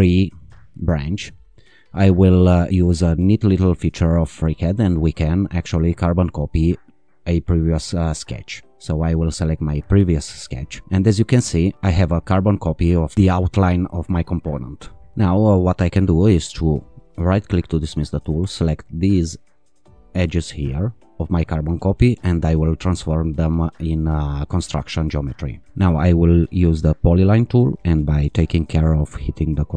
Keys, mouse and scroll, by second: 6.6 click, 10.0 click, 17.3-18.1 right drag, 18.9 click, 20.3-21.2 drag, 23.4 click, 26.7 click.